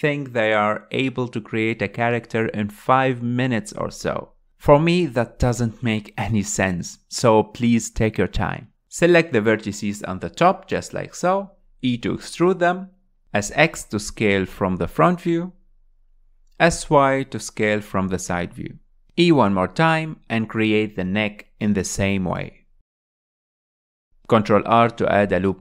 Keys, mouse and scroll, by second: 0.7 alt+click, 1.6 r, 2.8 g, 5.3 r, 6.5 r, 7.2 click, 7.5 g, 9.2 scroll down 3, 9.4 alt+z, 10.3 click, 11.3 click, 12.3 e, 14.6 s, 18.2 s, 20.0-22.4 shift+middle drag, 22.4 e, 24.1 s, 25.2 ctrl+r.